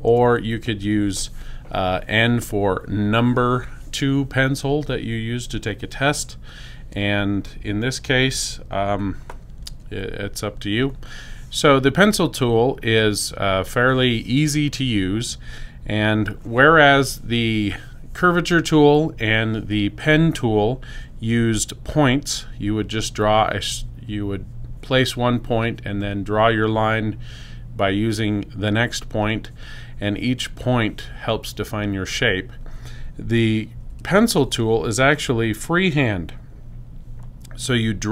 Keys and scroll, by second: 0.0 n.